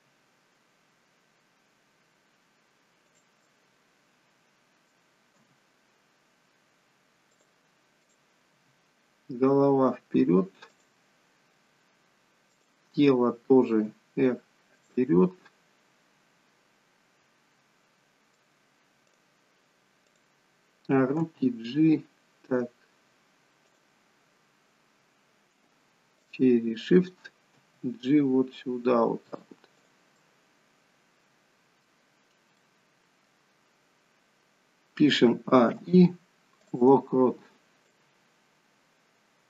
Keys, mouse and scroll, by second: 3.4 middle click, 5.5 g, 8.0 click, 8.5 g, 12.4 click, 13.7 r, 15.5 middle click, 19.0 click, 20.0 click, 21.2 g, 26.2 shift+click, 27.6 g, 30.1 middle click, 32.5 middle click, 35.3 a, 35.8 i, 38.0 click.